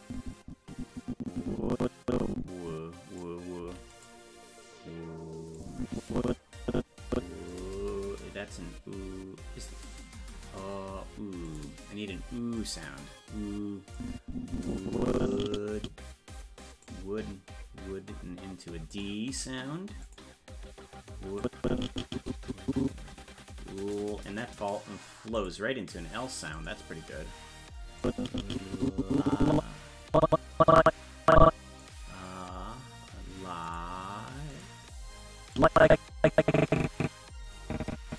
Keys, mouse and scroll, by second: 3.6 i, 5.5-7.5 drag, 11.4 click, 12.5 click, 13.9-16.8 drag, 18.9 click, 20.0 click, 21.4-23.9 drag, 25.3 click, 26.5 click, 28.0-31.8 drag, 33.6 click, 34.5 click, 35.5-38.1 drag.